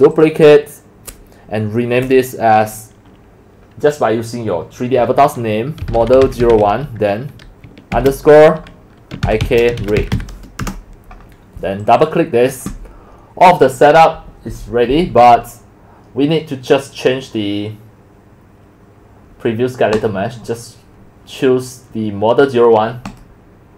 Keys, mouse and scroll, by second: 0.1 click, 0.9 click, 5.6-7.0 typing, 9.2-10.6 typing, 11.8 click, 19.9 click, 23.1 click.